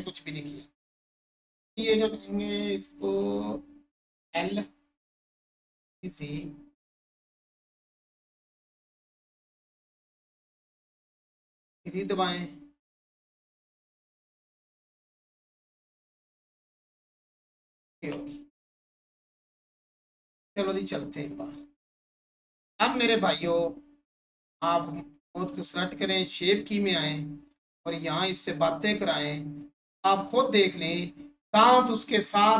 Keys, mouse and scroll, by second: 7.1 click, 9.9 3, 14.6 click, 16.9 1, 19.4 click, 24.7-32.5 drag.